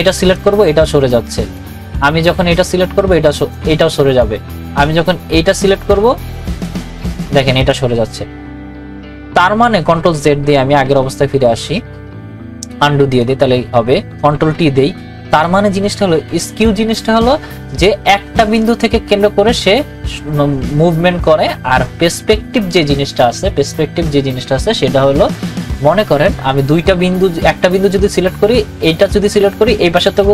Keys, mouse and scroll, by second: 0.3-5.7 drag, 5.7-9.9 drag, 10.0 click, 10.2 ctrl+z, 13.1 click, 14.3 ctrl+t, 15.3 right click.